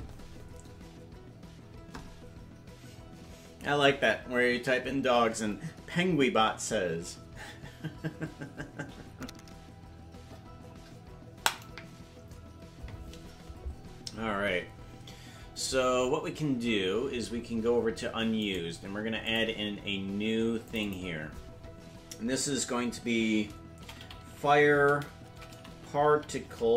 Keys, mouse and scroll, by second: 17.2 scroll down 8, 18.4-19.7 right drag, 20.6 click, 20.8 click, 21.5-26.7 drag.